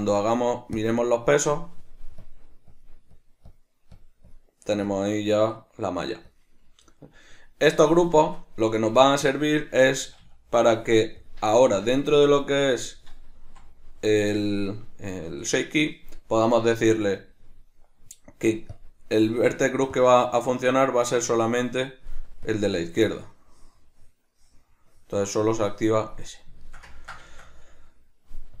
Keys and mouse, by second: 0.9 Tab, 0.9-2.2 middle drag, 2.2 click, 2.7 click, 3.1 click, 3.5 click, 3.9 click, 4.3 click, 4.9 click, 6.3 click, 8.1 Tab, 8.9 middle click, 14.1-18.7 shift+middle drag, 18.7-26.6 drag, 26.6-28.6 ctrl+shift+middle drag.